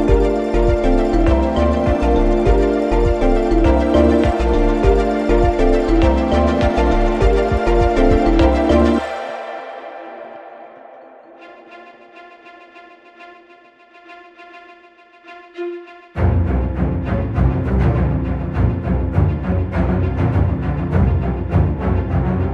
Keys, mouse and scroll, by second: 8.9 click, 10.8-11.5 scroll up 1, 12.5-13.2 scroll down 1, 13.2 click, 15.2 right click, 18.0-20.5 drag.